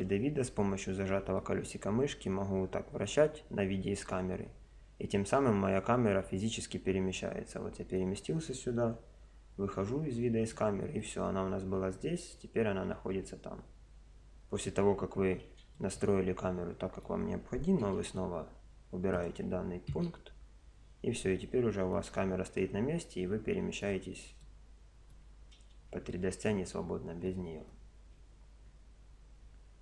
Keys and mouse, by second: 1.4-3.2 middle drag, 9.1 KP_0, 10.2-12.3 middle drag, 13.8 KP_0, 15.8-17.8 middle drag, 17.8 n, 19.2-20.9 drag, 19.9 n, 21.4-29.8 middle drag.